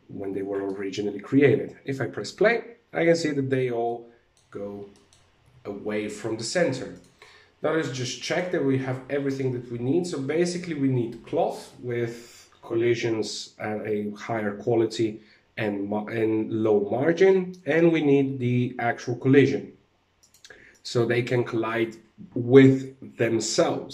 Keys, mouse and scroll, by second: 0.1 middle click, 1.0 alt+a, 3.4 middle click, 4.4 middle click, 5.0 alt+a, 6.4 right click, 7.7 click, 19.7 right click, 20.2 right click.